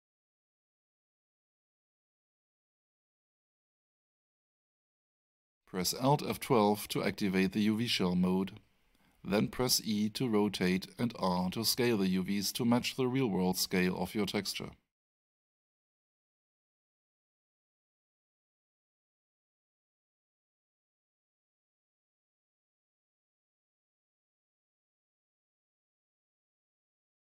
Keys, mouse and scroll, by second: 3.4 click, 7.0 alt+F12, 9.4 click, 12.0 alt+middle click, 13.2-13.6 scroll down 1, 14.4 alt+scroll down 1, 14.5 alt+middle click, 17.9 e, 20.0 click.